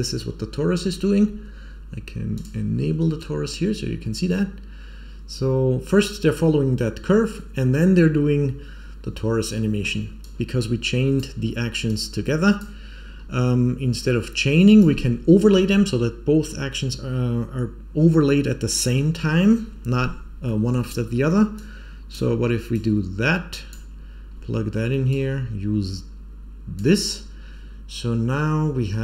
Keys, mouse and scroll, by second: 2.3 click, 10.2 click, 11.8 click, 13.3 scroll down 3, 13.9 click, 19.6-20.4 scroll up 1, 20.4 middle click, 20.4 scroll up 2, 21.5-22.1 drag, 22.6-23.6 drag, 24.3-25.0 scroll down 1, 25.0-26.8 drag, 25.0-25.6 scroll down 1.